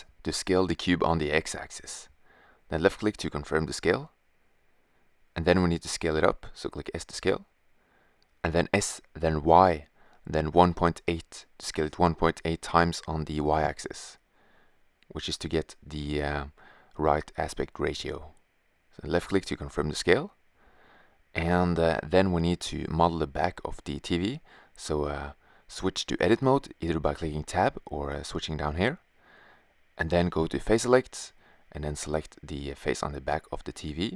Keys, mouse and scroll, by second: 0.5 s, 5.4 s, 8.0 drag, 19.4-20.2 middle drag, 29.4-30.6 middle drag, 31.1 right click, 31.6 click, 31.7 middle click.